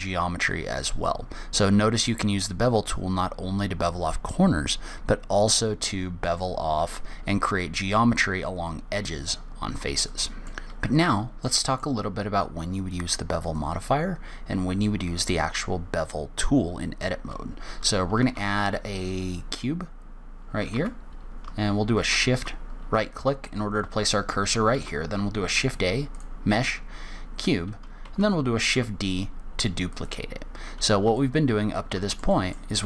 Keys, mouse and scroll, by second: 9.7-10.4 scroll down 1, 10.4 middle click, 10.4 scroll down 2, 10.5 shift+middle click, 11.8 middle click, 13.8 click, 18.5 shift+a, 21.1 ctrl+z, 22.3 shift+right click, 25.0 shift+a, 28.4 shift+d, 31.0-31.4 scroll up 1, 31.5 shift+middle click, 32.6 middle click.